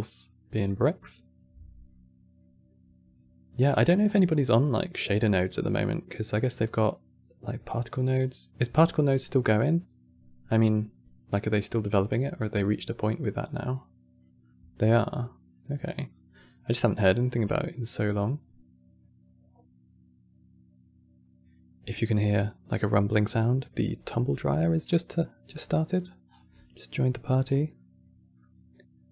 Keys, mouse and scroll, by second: 1.6-3.7 middle drag, 3.7 click, 7.9 click, 13.4-18.8 drag, 25.1-25.5 scroll down 4, 25.5 middle click, 26.0 scroll down 8, 26.2 middle click, 27.1-27.5 scroll down 3, 27.5-29.1 middle drag.